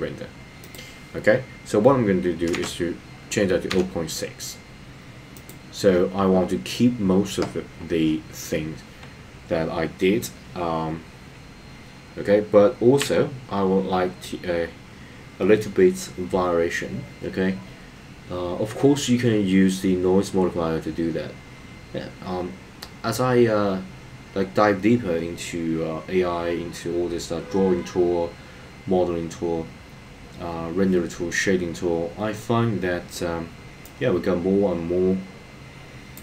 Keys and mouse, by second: 0.6-5.4 drag.